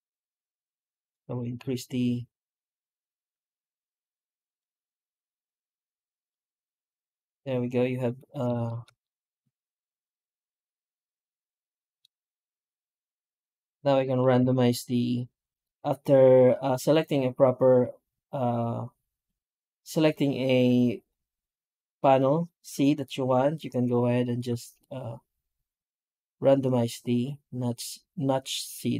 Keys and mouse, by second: 6.2 middle drag, 6.7 middle drag, 7.0-8.3 middle drag, 8.5 shift+middle drag, 8.9-10.8 middle drag, 10.9 middle drag, 11.3-11.8 middle drag, 11.8 middle click, 12.1 shift+middle click, 12.5-13.2 middle drag, 13.8 middle click, 14.2 F9.